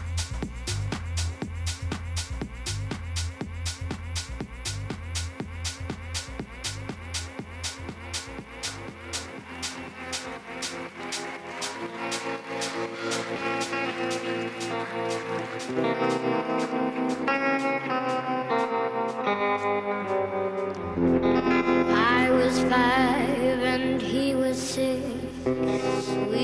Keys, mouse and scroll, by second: 0.5-2.4 right drag, 2.0-3.7 drag, 5.9-8.3 middle drag, 8.3 KP_3, 8.7 z, 9.5 middle click, 10.3 a, 10.7 a, 11.0 a, 11.7 z, 15.8 KP_3, 18.8-23.9 middle drag, 21.0-23.4 drag, 25.3-26.4 middle drag.